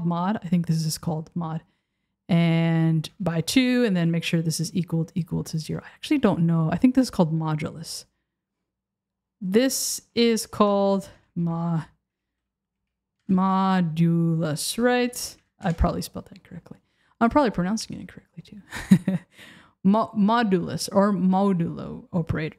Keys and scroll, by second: 13.2 BackSpace, 15.7 Return.